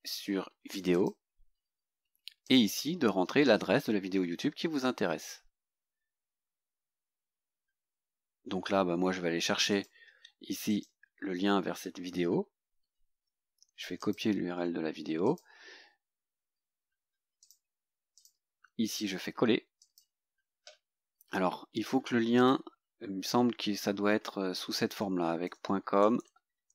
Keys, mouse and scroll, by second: 1.0 click, 2.5 click, 9.8 click, 10.8 right click, 14.0 click, 15.3 click, 17.5 click, 18.2 click, 19.0 right click, 19.9 click, 22.4 click, 24.6-26.7 typing.